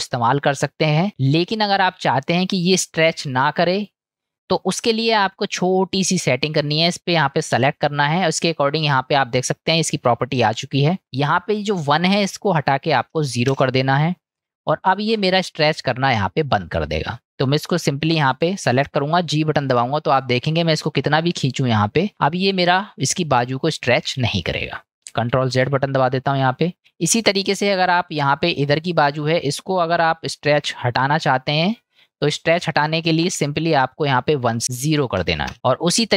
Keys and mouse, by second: 1.3 ctrl+z, 2.4-2.8 middle drag, 3.6-4.4 middle drag, 5.4-6.0 middle drag, 6.3 click, 7.2 click, 11.1-14.0 drag, 15.5 middle click, 16.4 click, 25.8 ctrl+z, 26.8 middle drag, 28.9-29.3 middle drag, 33.2 ctrl+z, 34.5-35.5 drag, 35.5-36.1 middle drag.